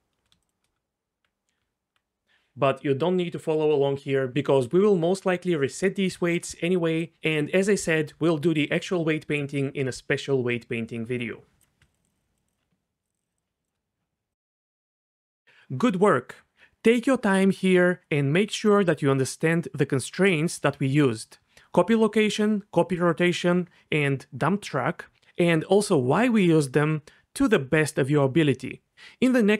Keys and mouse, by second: 0.8 Tab, 1.6 Tab, 4.1 f, 4.3 click, 4.8 click, 5.0 click, 5.2 click, 5.3 f, 6.7 click, 8.2 ctrl+click, 9.0 ctrl+click, 9.7 ctrl+click, 11.0 ctrl+click, 15.3 click, 15.6 ctrl+z, 15.8 alt+r, 16.9 r, 17.1 r, 17.2 y, 17.8 click, 18.8 click, 19.0 ctrl+z, 22.1 click, 23.4 r, 23.5 y, 27.1 click, 28.0 ctrl+click, 28.4 ctrl+click.